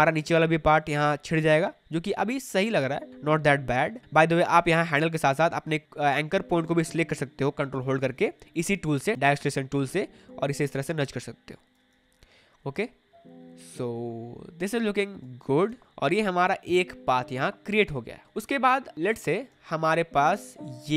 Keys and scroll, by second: 12.7 space, 15.6 space, 18.4 space.